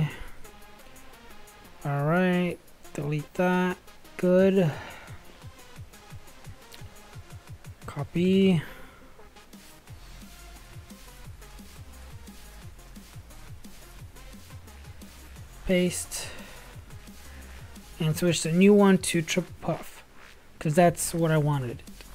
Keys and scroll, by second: 5.4 Delete, 6.1 i, 6.3 Tab.